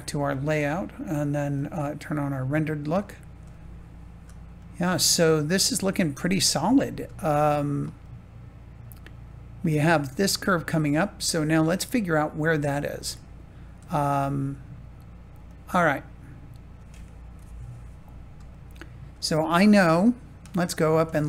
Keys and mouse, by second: 0.0 ctrl+s, 2.1 middle click, 3.4 shift+middle click, 4.5-6.1 middle drag, 7.1 shift+middle click, 7.9-10.1 middle drag, 11.5-12.5 middle drag, 12.7 shift+middle click, 15.5 click, 17.3 KP_7, 18.4 shift+middle click.